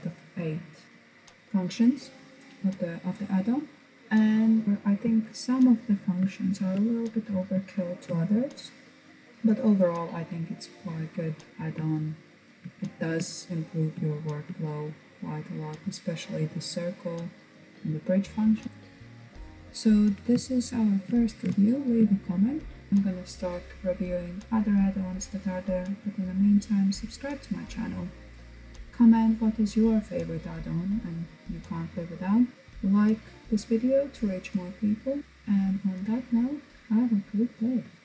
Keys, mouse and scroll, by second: 3.8-9.3 middle drag, 11.1-12.5 shift+middle drag, 12.5-13.2 scroll up 1, 13.2-16.3 shift+middle drag, 18.6-19.6 scroll down 1, 19.6-22.9 shift+middle drag.